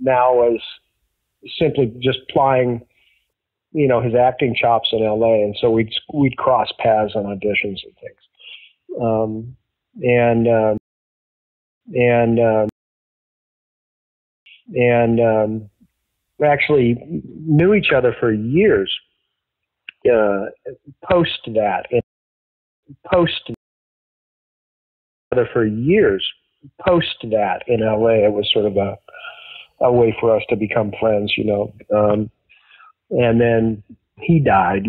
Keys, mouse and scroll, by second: 0.3 click, 1.3 click, 2.2 click, 3.5-5.4 drag, 5.7 click, 7.1 ctrl+s, 9.5-10.9 drag, 10.7 space, 11.5 ctrl+shift+Delete, 11.7 space, 12.6 space, 12.7 click, 13.5 click, 14.3 click, 14.4 space, 14.9 click, 15.7 click, 20.5-21.9 drag, 21.9 space, 22.5 ctrl+shift+Delete, 22.7 space, 23.4 space, 23.7 click, 24.5 click, 25.2 click, 25.2 space, 26.2-28.5 drag, 29.0 click, 29.8 click, 30.6-31.7 drag, 32.3 ctrl+s, 33.6-34.8 drag.